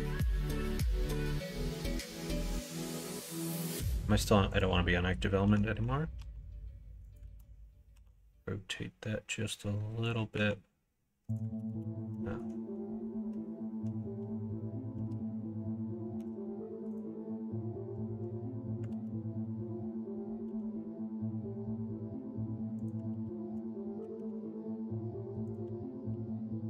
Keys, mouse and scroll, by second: 1.3 click, 6.1 e, 7.2 ctrl+z, 7.9 r, 10.3 s, 11.5 ctrl+z, 11.7 ctrl+z, 16.1 x, 18.9 ctrl+z, 20.4 r, 23.1 ctrl+z, 24.0 g, 26.1 r.